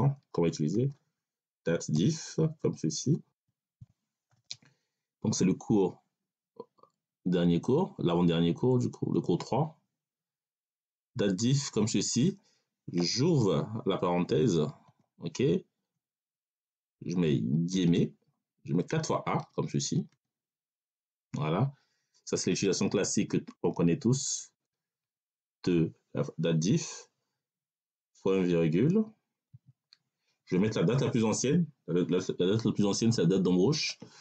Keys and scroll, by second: 0.6 d, 1.4 a, 1.8 t, 2.0 e, 3.2 f, 3.7 i, 4.2 f, 14.7 5, 17.7 3, 19.3 a, 24.9 3, 29.4 ..